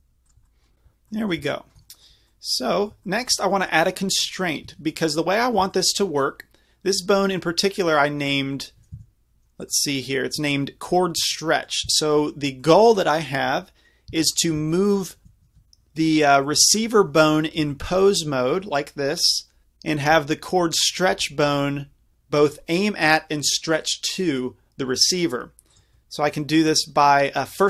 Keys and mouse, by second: 4.7 Tab, 6.9-9.0 drag, 9.0 Tab, 10.1-11.4 drag, 14.1 Tab, 14.4-15.2 drag, 15.2 Tab, 16.1-18.5 drag, 17.6 g, 25.8-26.1 right drag.